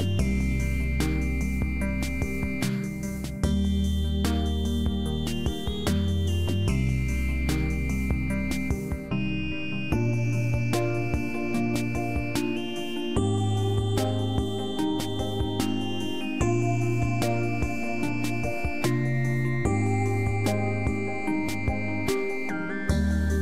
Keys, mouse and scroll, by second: 1.6 click, 2.2 click, 6.6 click, 11.2 click, 12.1 s, 21.3 click, 22.8 click.